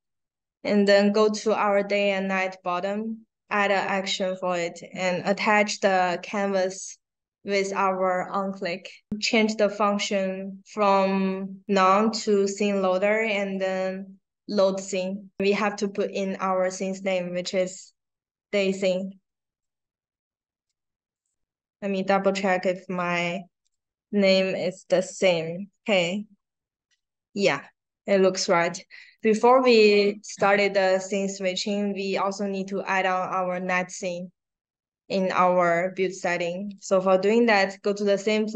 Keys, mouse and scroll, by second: 0.6 click, 2.9 middle click, 2.9 scroll down 1, 3.4 click, 5.3-9.1 drag, 17.4 d, 18.6-20.6 typing, 21.1 click, 23.6 click, 24.8 click, 29.3 click, 32.1 click, 36.7 click.